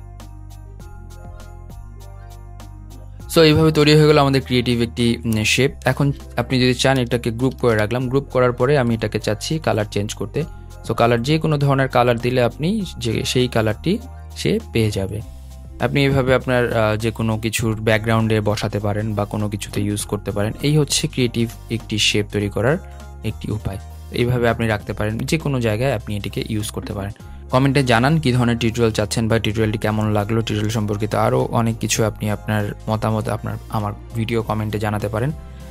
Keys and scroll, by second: 0.4 super+z, 1.0 super+z, 1.0 super+g, 1.4 super+0, 7.3 super+g, 8.6 super+g.